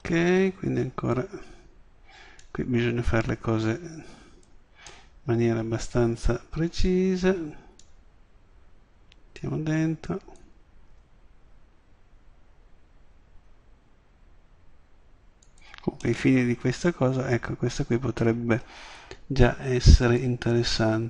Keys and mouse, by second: 4.2 middle click, 7.8-9.7 drag, 10.9 s, 15.6-16.1 drag, 17.0-17.4 drag, 18.0-20.2 middle drag, 20.2 click.